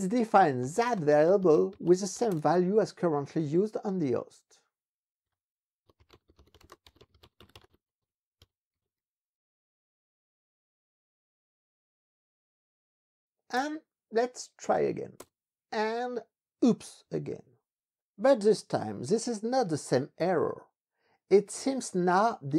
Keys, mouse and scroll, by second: 0.0-2.4 typing, 4.0 ctrl+b, 4.5 ctrl+Down, 5.3 Escape, 5.6-9.3 typing, 13.6 Return, 14.7 Up, 15.2 Return, 17.1 ctrl+b, 17.3 Page_Up, 22.3 ctrl+b.